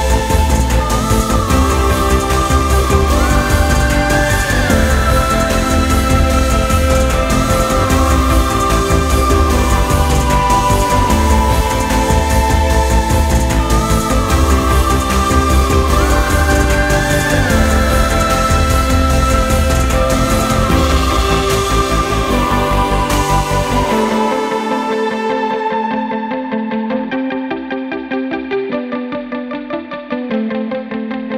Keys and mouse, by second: 1.2-7.0 middle drag, 7.0 click, 7.7-10.7 drag, 11.5-15.8 middle drag, 15.8 click, 28.3-31.3 middle drag.